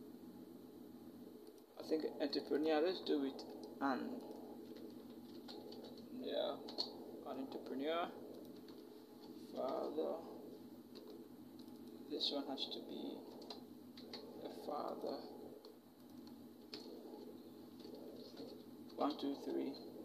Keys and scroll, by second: 5.1-6.5 typing, 9.4 ctrl+j, 13.8 -, 18.1 v, 18.7 Down, 18.9 Down, 19.2 Down.